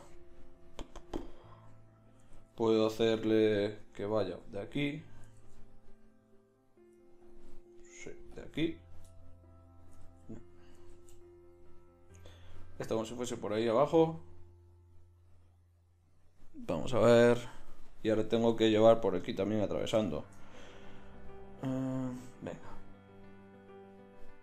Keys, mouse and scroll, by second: 2.4 ctrl+z, 5.4 ctrl+z, 9.0-10.0 middle drag, 10.0 ctrl+z, 11.0 ctrl+z, 12.3-13.6 drag, 22.5-23.8 middle drag.